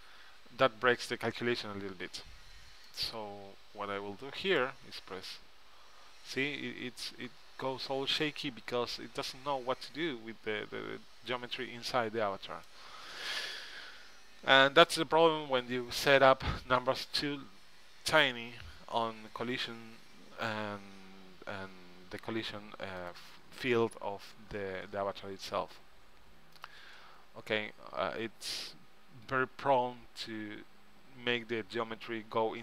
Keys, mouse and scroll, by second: 4.0-5.8 drag, 4.8-6.5 right drag, 23.2-25.0 drag, 24.8-27.1 middle drag, 24.9 right click, 26.7-28.5 drag, 26.7 right click.